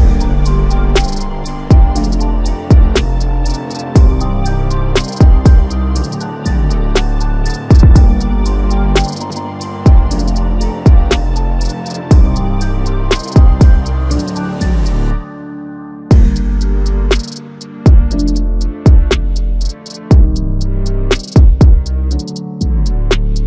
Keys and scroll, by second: 2.9 ctrl+z, 11.4 ctrl+c, 11.5 ctrl+alt+Tab, 13.2 ctrl+v.